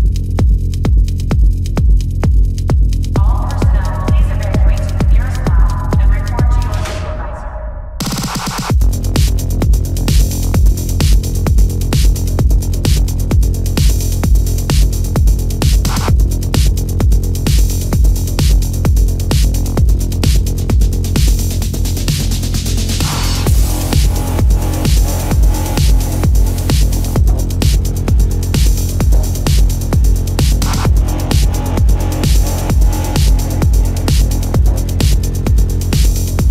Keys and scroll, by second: 4.6 space, 5.9 ctrl+alt+z, 11.7 ctrl+-, 15.4 ctrl+-, 18.4 ctrl+=, 19.8 ctrl+=, 20.7 ctrl+=, 22.9 ctrl+=, 23.2 space, 24.7 space, 28.2 ctrl+alt+z, 29.5 ctrl+alt+z.